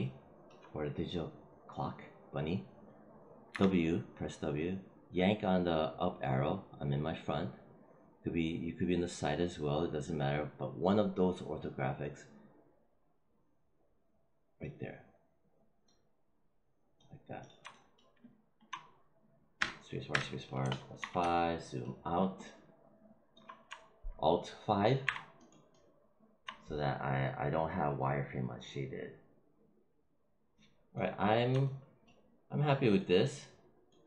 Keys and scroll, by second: 3.4 w, 19.5 space, 20.9 5, 24.9 alt+5.